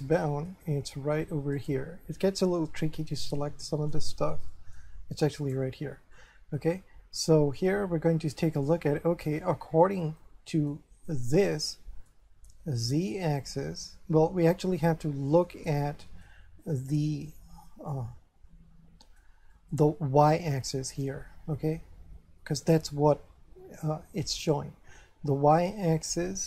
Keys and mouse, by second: 0.2 shift+middle click, 1.6 right click, 2.7 middle click, 4.5 shift+middle click, 5.4 right click, 6.1 middle click, 9.8 middle click, 11.1 middle click, 14.7 middle click, 15.8 middle click, 16.6 shift+middle click, 19.5 middle click.